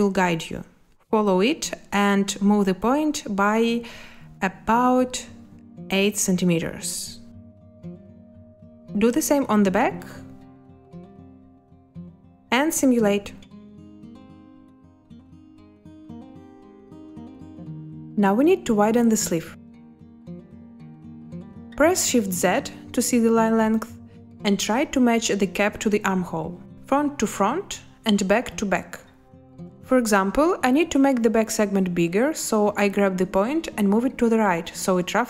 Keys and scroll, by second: 3.1 6, 5.1 Delete, 5.7 8, 11.5 8, 13.9 space, 22.4 space, 24.1 shift+z.